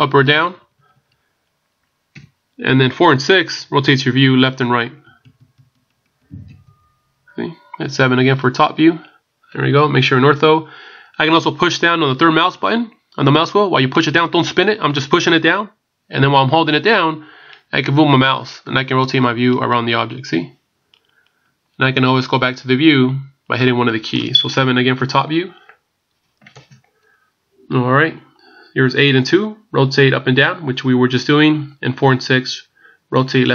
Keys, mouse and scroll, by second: 0.3 KP_8, 1.0 KP_8, 2.2 KP_7, 4.0 KP_4, 5.0-5.9 KP_6, 6.5 KP_4, 6.7-7.2 KP_4, 8.2 KP_7, 13.9 middle click, 25.0 KP_7.